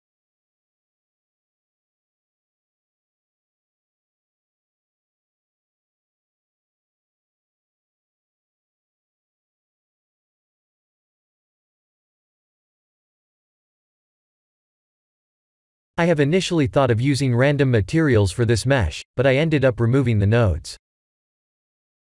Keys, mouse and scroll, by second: 2.5 s, 4.6 click, 5.6-6.2 scroll down 7, 6.2 g, 8.1 shift+middle click, 8.7 shift+middle click, 9.2 middle click, 9.6 middle click, 9.9 click, 10.5-10.8 scroll up 3, 10.8 middle click, 13.6 middle click, 13.6 click, 15.0 click, 16.5 shift+middle click, 17.3 click, 17.7 shift+a, 21.9 click.